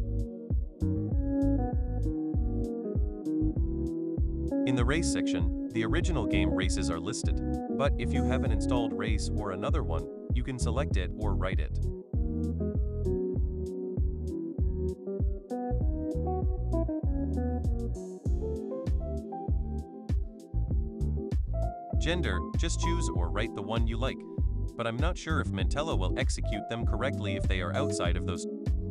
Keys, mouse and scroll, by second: 0.0 click, 4.6 click, 7.9-9.1 drag, 10.4 click, 12.1 click, 12.6 click, 12.9-14.1 typing, 16.4 click, 19.1-20.8 drag, 22.0 click, 24.1 click, 26.1 click, 28.1-28.9 typing.